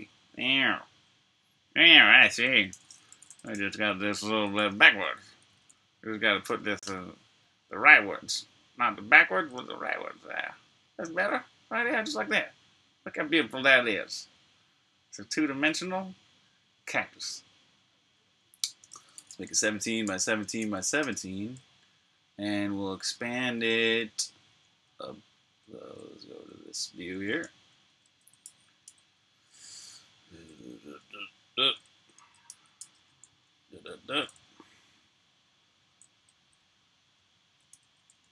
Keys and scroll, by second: 0.0 super+Tab, 2.8-6.1 typing, 6.8 Return, 18.8-21.0 typing, 27.9 super+a, 28.3 super+c, 28.7 super+v, 32.1 super+a, 32.4 super+c, 32.7 super+v, 35.9 super+a, 36.3 super+c, 37.8 super+v.